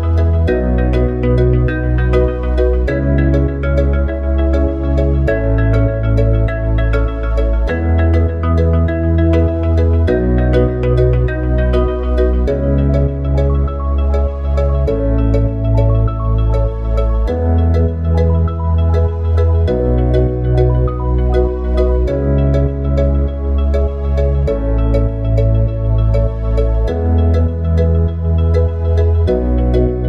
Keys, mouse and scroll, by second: 1.3 click, 4.7 s, 6.4 r, 8.8 click, 9.7 click, 11.7 s, 18.0 click, 20.0 ctrl+v, 20.5 click, 22.2 click, 29.2 click.